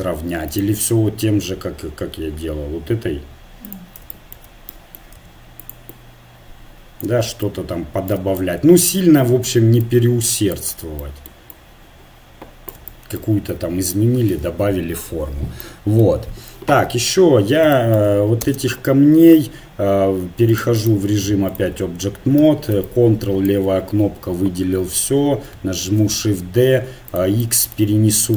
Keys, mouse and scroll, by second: 0.5-2.5 drag, 4.1 middle click, 5.2 f, 8.4-13.4 drag, 13.6 Tab, 14.5 Tab, 16.8 KP_1, 18.4 space, 20.8-22.4 drag, 22.4 a, 22.9-24.7 drag, 25.8 shift+d.